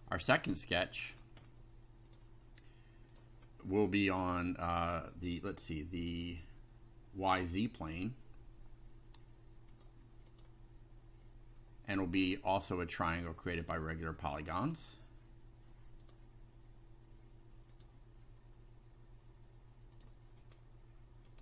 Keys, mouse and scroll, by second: 0.3 scroll down 2, 1.1 click, 2.1 click, 3.1 click, 5.3-8.0 middle drag, 9.7 click, 10.3 click, 13.5 click, 14.6 click, 16.0 click, 17.7 click, 19.9 click, 20.5 right click, 21.3 right click.